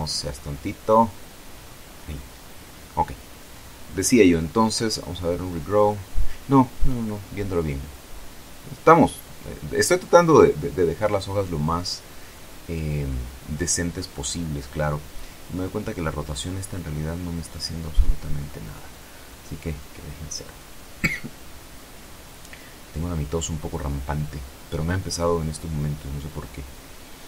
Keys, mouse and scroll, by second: 0.8 click, 1.6 right click, 5.4 click, 7.8 click, 9.6-10.2 scroll down 2, 10.7 scroll down 2, 12.3-15.4 drag, 15.4-15.8 scroll down 2, 15.8 scroll up 2, 18.0 click, 19.1 KP_0, 19.2 KP_Enter, 20.8-24.1 drag.